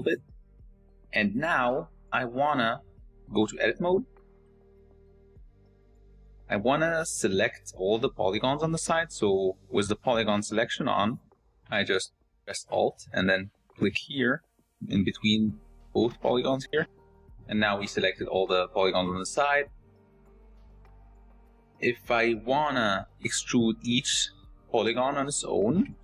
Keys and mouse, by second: 0.0-0.2 typing, 1.2 middle click, 1.3 click, 2.2 shift+middle click, 3.1 click, 4.5 shift+Tab, 4.8 shift+click, 6.9 click, 15.5 alt+click, 16.3 click, 17.6 click, 17.9 middle click, 18.7 shift+middle click, 21.2 middle click.